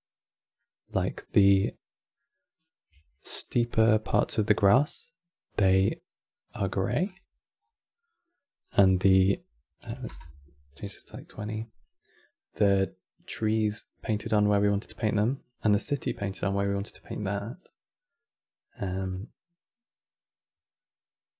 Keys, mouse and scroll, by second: 0.7-4.3 ctrl+middle drag, 4.3-4.8 scroll down 7, 6.2 scroll down 2, 6.8-7.6 scroll down 7, 8.7-12.2 drag.